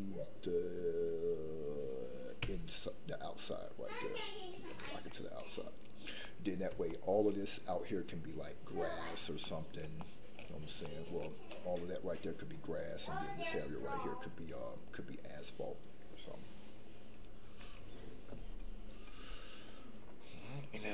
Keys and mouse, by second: 5.2 middle click, 6.2 middle click, 6.9 shift+middle click, 9.6 middle click, 9.9 shift+middle click, 11.0 middle click.